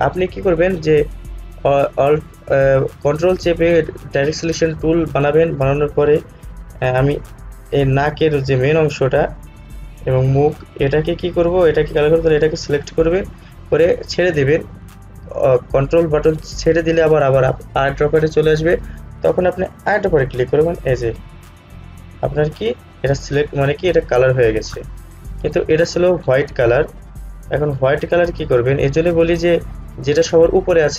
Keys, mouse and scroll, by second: 1.2 click, 19.9 click.